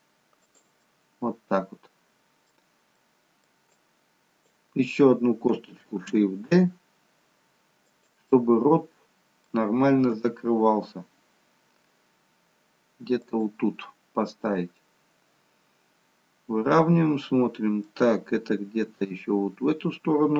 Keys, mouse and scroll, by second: 1.0 middle click, 3.0 middle click, 3.8 click, 6.5 shift+d, 8.3 middle click, 10.3 g, 14.8 middle click.